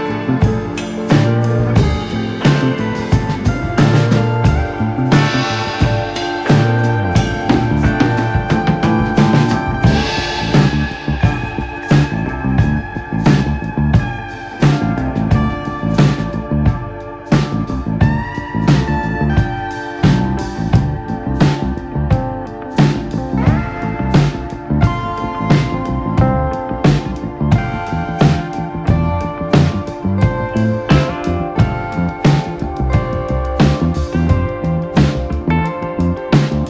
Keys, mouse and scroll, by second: 1.3 scroll up 2, 1.5 shift+middle click, 1.8 g, 4.2 click, 4.4 scroll down 1, 4.5 middle click, 5.1 Tab, 5.3 click, 6.0-6.5 middle drag, 6.5 click, 6.8 right click, 7.1 click, 7.3-8.3 shift+middle drag, 8.7 KP_1, 9.0-9.3 scroll up 1, 9.3 click, 9.4 Tab, 9.7-10.1 scroll up 1, 10.1 g, 13.2 click, 13.4 g, 14.2 click, 14.4-17.5 typing, 15.1 click, 15.9 click, 16.5 click, 17.4 click, 18.4-18.7 scroll up 2, 18.7 scroll down 2, 18.9 shift+middle click, 19.1-19.5 scroll up 1, 19.5 click, 19.9 g, 20.5 click, 20.9 r, 21.9 scroll down 3, 22.2 Tab, 22.4 click, 22.6 scroll down 1, 22.8-23.5 shift+middle drag, 23.5-23.8 scroll up 1, 23.8-24.1 shift+middle drag, 24.1 click, 24.3 scroll up 2, 24.4-24.9 shift+middle drag, 24.9-25.6 right drag, 25.6 Tab, 26.0 middle click, 26.3 scroll up 2, 26.6 shift+middle click, 27.1 ctrl+r, 28.6 scroll down 3, 28.8-29.8 shift+middle drag, 29.8-30.8 drag, 31.8 Tab, 32.5 click, 33.2 KP_1, 33.6 Tab, 35.1 click.